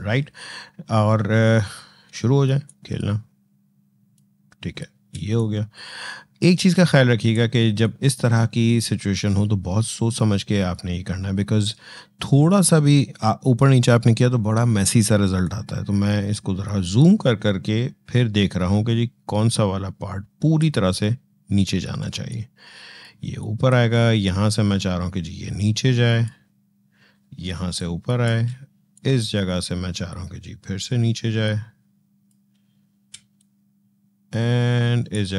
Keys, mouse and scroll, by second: 1.4 alt+scroll up 1, 2.5-5.0 drag, 5.0 space, 5.2 click, 5.5 space, 7.6 click, 7.7 space, 15.2-21.9 drag, 21.9 space, 22.1 click, 22.4 space, 23.2 click, 23.3 space, 24.0-27.3 drag, 27.3 space, 27.6 click, 27.8 space, 28.7-33.0 drag, 33.0 space, 33.2 click, 33.5 space.